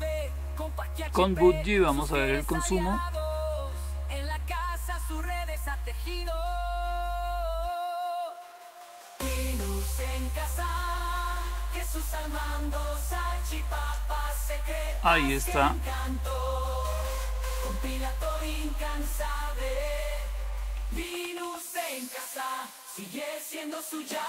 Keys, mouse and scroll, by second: 16.8 click, 19.7 click, 20.4-21.8 typing, 22.9 Return.